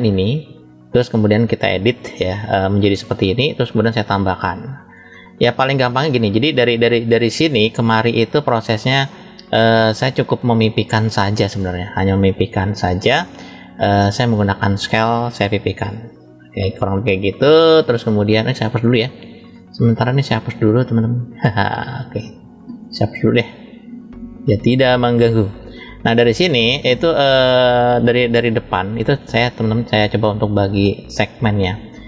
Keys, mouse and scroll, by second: 0.1 click, 0.1 scroll down 1, 5.0 scroll up 2, 5.1-6.1 shift+middle drag, 6.4 click, 7.1 click, 8.7 click, 9.3 click, 10.0 click, 10.6-12.0 middle drag, 12.6 click, 14.1 click, 15.2 click, 15.4 click, 18.5-20.0 drag, 20.6-24.8 drag, 25.2-26.3 middle drag, 26.9 drag, 28.1-29.2 middle drag.